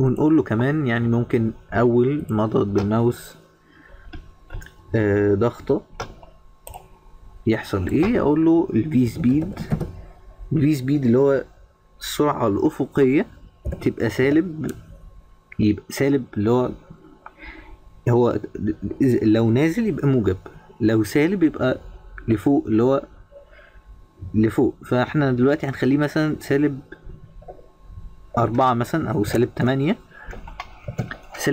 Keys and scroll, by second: 29.7 BackSpace.